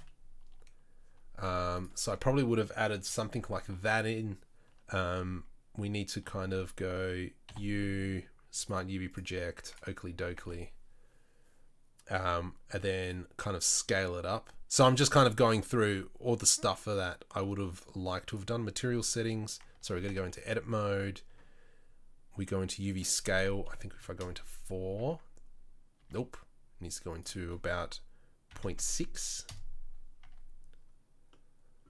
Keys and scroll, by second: 6.3 Tab, 6.7 a, 7.7 u, 10.7 Tab, 20.1 Tab, 25.2 Tab, 26.2 Tab, 30.4 Tab.